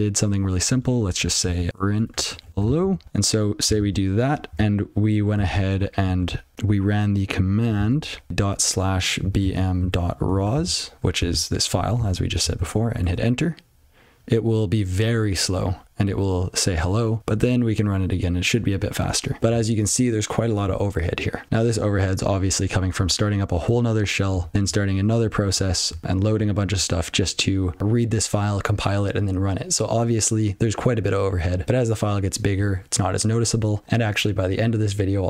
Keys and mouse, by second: 0.6 click, 1.3 ctrl+b, 1.7-3.3 typing, 3.8 ctrl+s, 5.4 alt+&, 6.2 ctrl+g, 23.6 click, 24.4 click, 25.5 click, 25.9 click, 26.3 click, 26.6 click.